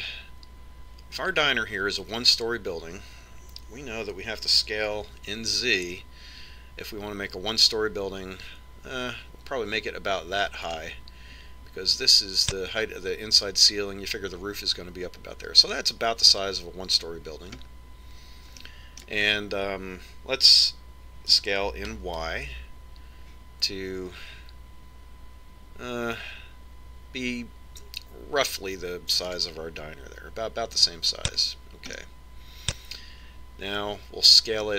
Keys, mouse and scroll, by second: 6.2 s, 19.4-22.2 middle drag, 23.1 s, 32.7 click, 33.9-34.7 middle drag.